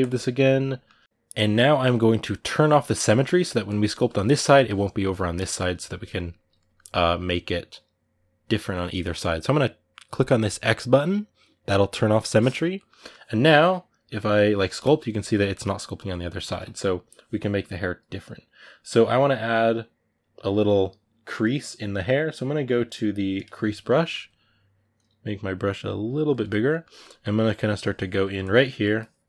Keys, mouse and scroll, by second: 3.4-4.8 drag, 4.8 ctrl+z, 5.3-11.7 ctrl+middle drag, 11.7 click, 12.5-14.6 ctrl+middle drag, 14.6 click, 15.1-16.3 middle drag, 16.3 ctrl+z, 23.2 click, 23.5-25.8 middle drag, 25.8 f, 26.5 ctrl+middle click, 27.2 click, 28.0 middle click, 28.2 click, 28.5 middle click, 28.7 click.